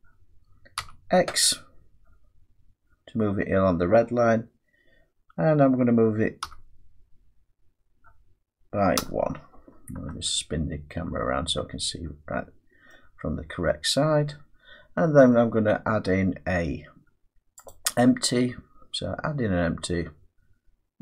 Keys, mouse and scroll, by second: 0.8 x, 6.4 1, 9.0 Return, 12.9 middle click, 17.7 click.